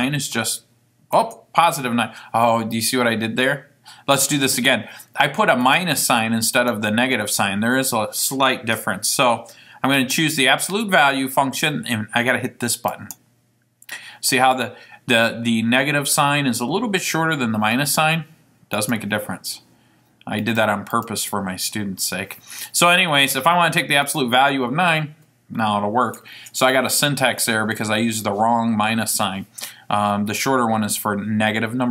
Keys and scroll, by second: 0.1 Return, 1.4 Return, 10.2 Return, 18.9 9, 21.0 Right, 24.2 Return.